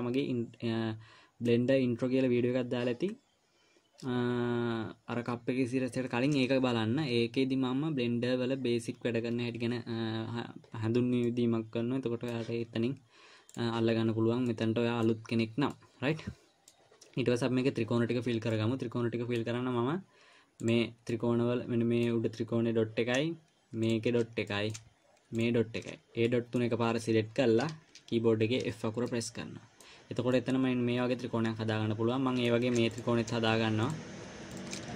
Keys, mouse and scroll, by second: 11.6 middle click, 13.9 click, 14.8 middle click, 16.1 middle click, 18.9 middle click, 21.0 click, 21.5 middle click, 24.2 shift+click, 24.9 middle click, 25.8 shift+click, 26.6 middle click, 29.0 f, 29.4 middle click, 30.7 middle click, 33.3 click, 34.2 shift+click.